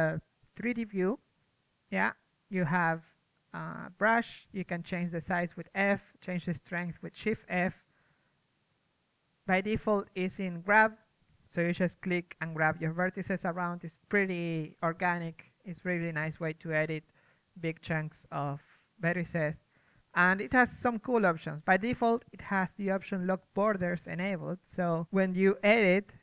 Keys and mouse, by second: 0.9 middle click, 1.1 ctrl+z, 2.2-3.6 drag, 3.1 ctrl+z, 3.6 f, 4.9-5.3 middle drag, 5.3 shift+f, 7.4 ctrl+z, 8.7 ctrl+z, 9.0 f, 9.6-11.4 drag, 11.4 ctrl+z, 14.4 ctrl+z, 16.3 ctrl+z, 18.2 ctrl+z, 20.1 ctrl+z, 20.5 f, 21.9 ctrl+z, 22.6 ctrl+z, 23.5 ctrl+z.